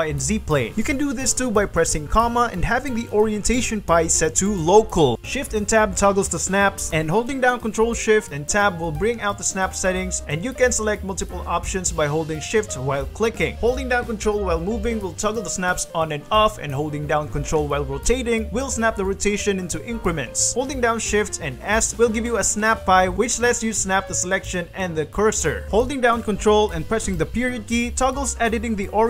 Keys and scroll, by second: 1.2 shift+x, 1.6 Escape, 2.0 ,, 4.5 g, 5.6 shift+Tab, 14.0 ctrl+g, 14.6 ctrl+g, 15.4 ctrl+g, 16.0 ctrl+g, 16.9 ctrl+g, 17.7 ctrl+y, 20.2 alt+s, 27.3 ctrl+., 28.6 g.